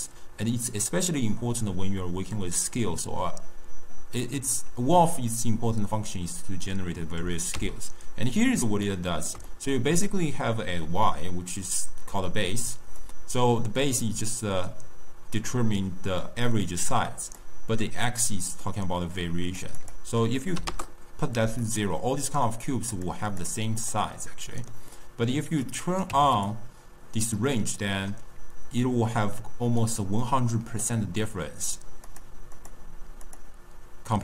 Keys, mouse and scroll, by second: 0.8-3.9 drag, 7.9 x, 8.8-12.5 ctrl+middle drag, 12.9-16.0 drag, 18.0-21.5 drag, 21.5-22.8 middle drag, 22.8 click, 23.2 click, 23.7 click, 24.2-25.5 middle drag, 25.5 click, 27.3-30.4 middle drag, 32.0 click, 32.5 click, 33.2 click.